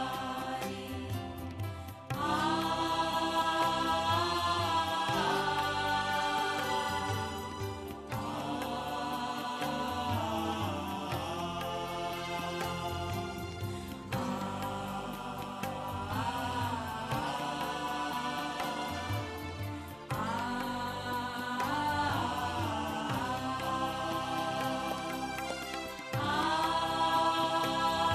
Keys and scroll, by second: 5.4 ctrl+KP_7, 7.0 ctrl+KP_Subtract, 7.2 ctrl+KP_Subtract, 8.4 space, 10.0 ctrl+c, 10.2 b, 10.8 ctrl+shift+Right, 14.5 shift+Left, 15.0 Left, 16.0 Left, 16.4 Right, 16.5 Right, 17.2 Right, 17.6 Left, 19.1 space, 20.3 ctrl+z, 22.8 ctrl+c, 23.0 b, 23.3 shift+Right, 24.8 Left, 26.7 shift+Right, 27.4 shift+Left.